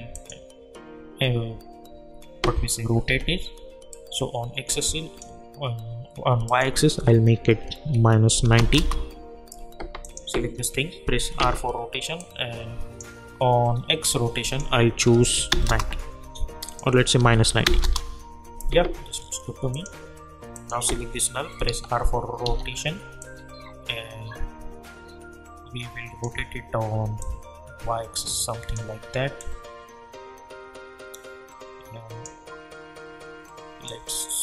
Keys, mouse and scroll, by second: 3.0 r, 3.9-6.5 drag, 8.7 Return, 10.0 click, 11.4 r, 12.2-13.7 drag, 13.7 scroll down 1, 14.4 click, 15.6 Return, 16.7 click, 17.2 -, 17.8 Return, 19.2 scroll up 1, 19.7 click, 21.7 r, 22.4 r, 23.2-34.4 drag.